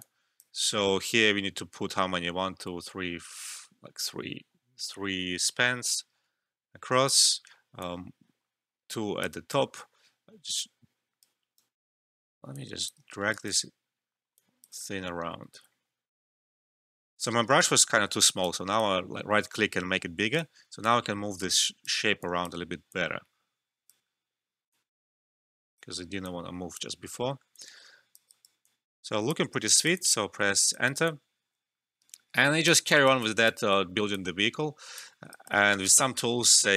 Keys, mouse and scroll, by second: 0.0-3.0 alt+drag, 5.4-11.5 drag, 11.5-12.5 right drag, 12.5 click, 13.0 alt+middle click, 13.3 alt+right click, 14.3 click, 14.7 alt+middle click, 15.5 ctrl+z, 17.5-20.8 right drag, 20.8-27.2 drag, 27.2 alt+middle click, 27.5 alt+click, 28.3 alt+right click, 28.6 alt+click, 29.6 alt+right click, 29.9 alt+click, 30.3 Return, 30.8 alt+right click, 31.0 alt+click, 32.9 alt+right click, 33.2 alt+click, 33.8 alt+middle click, 34.1 alt+click, 35.1 alt+middle click, 35.3 alt+right click, 36.0-36.5 scroll down 1.